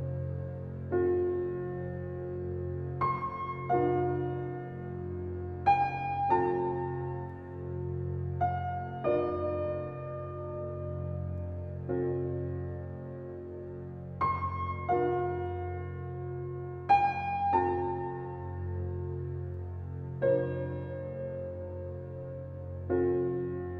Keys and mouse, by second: 0.6 1, 1.3-3.9 alt+shift+drag, 4.4 g, 4.5 g, 5.4 Escape, 5.8 typing, 6.2-7.2 drag, 7.1-9.5 typing, 8.1 click, 9.2 click, 10.0 shift+click, 10.8-11.3 typing, 12.2-13.4 drag, 13.6-14.7 typing, 18.3 Escape, 19.3 typing, 21.1 Escape, 21.8-22.5 typing.